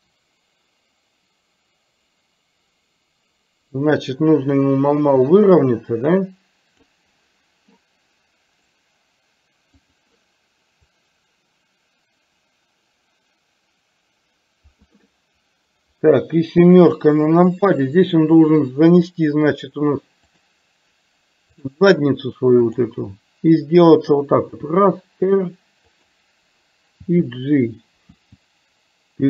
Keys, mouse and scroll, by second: 8.6-10.0 right drag, 11.0-14.9 drag, 17.0 KP_7, 20.4-21.8 drag, 24.6 r, 27.1 g, 28.1 g.